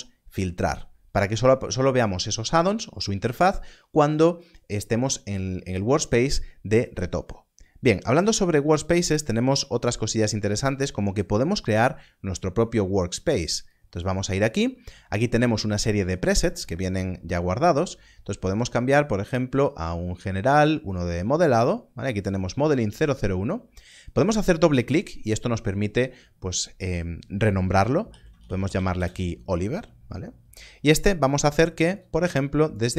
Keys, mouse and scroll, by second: 13.7 click, 20.6 click, 23.7 click, 27.7 click, 28.0 shift+o, 28.4 i, 28.5 v, 28.6 e, 28.9 Return, 31.9 Return.